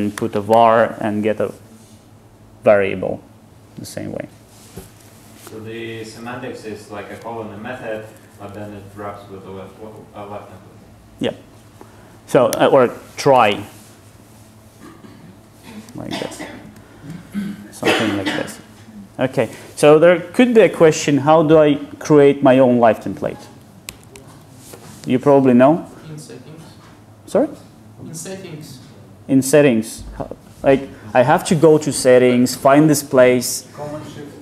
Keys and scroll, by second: 0.6 Tab, 5.6 Escape, 8.1 super+z, 13.6 Tab, 16.2 super+z, 17.5 super+z.